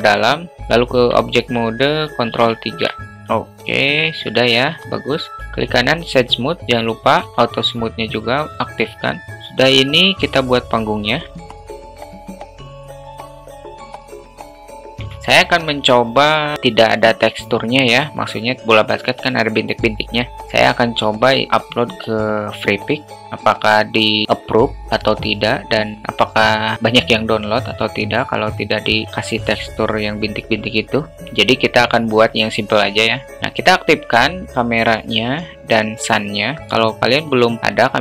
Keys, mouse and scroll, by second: 1.5 Tab, 2.9 ctrl+3, 3.2-3.8 alt+middle drag, 4.4-5.3 middle drag, 7.9 q, 9.4 `, 10.4-11.5 drag, 11.7 shift+a, 11.8 s, 12.1 alt+middle click, 12.3 alt+middle click, 12.3 Tab, 12.4 2, 12.6 alt+shift+middle click, 12.7 e, 13.1 alt+space, 13.1 alt+middle click, 13.2 ctrl+v, 13.4 ctrl+b, 13.8 Tab, 13.9 right click, 14.0 `, 14.5 click, 14.7 shift+middle click, 15.8-16.3 alt+middle drag, 31.5 click, 33.7 click, 36.2 click, 37.1 click.